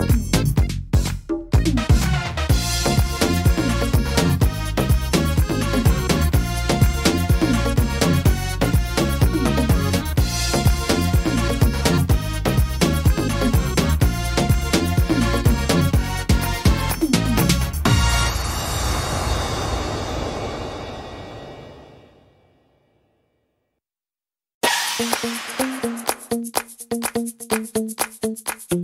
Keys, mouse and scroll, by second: 0.6 scroll down 4, 1.1 middle click, 1.5-3.5 scroll up 6, 3.5 middle click, 5.1 ctrl+r, 6.2 ctrl+r, 8.7 ctrl+r, 10.7 middle click, 12.3 middle click, 14.8 click, 15.6 right click, 15.9 shift+right click, 16.8 right click, 17.2 shift+right click, 17.5 middle click, 18.3 shift+right click, 18.9 shift+right click, 19.3 shift+right click, 19.7 shift+right click, 20.2 shift+right click, 21.5 e, 22.0 s, 23.9 scroll up 1, 25.0 ctrl+r, 25.7 middle click, 27.0 s, 28.3 middle click.